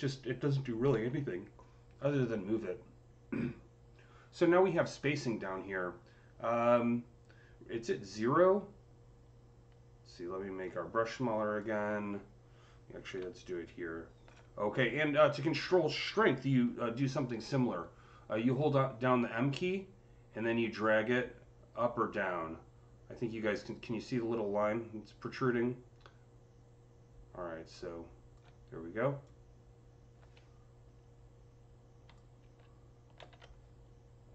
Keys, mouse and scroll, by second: 0.8 ctrl+z, 10.4 ctrl+z, 10.4-16.4 drag, 13.0-14.3 typing, 16.2 typing, 18.4 click, 18.4-20.8 typing, 20.2 click, 22.5 typing, 23.0 click, 24.1-25.4 drag, 24.1-25.9 typing, 29.1-34.3 drag, 33.0 ctrl+z, 33.0 typing.